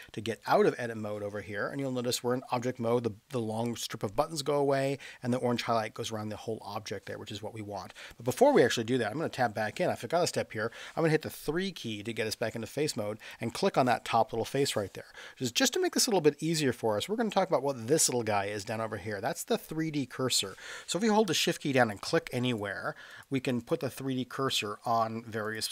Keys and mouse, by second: 0.3 Tab, 9.1 Tab, 11.5 3, 13.2 click, 21.8 shift+right click, 22.5 shift+right click, 23.1 shift+right click, 23.6 shift+right click, 24.5 shift+right click, 25.4 shift+right click.